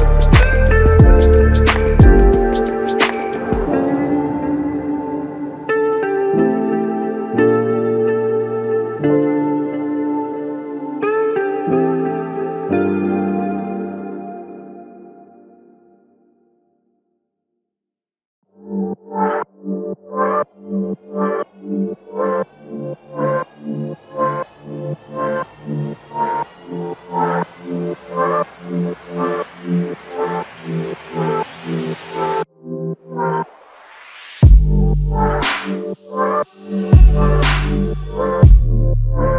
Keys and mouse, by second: 1.1 typing, 2.3-3.0 typing, 3.2 double click, 11.4 shift+click, 16.1 alt+click, 18.9 shift+click, 21.5 alt+click, 26.2 shift+click, 29.6 alt+click, 33.2 alt+click, 37.7 shift+click.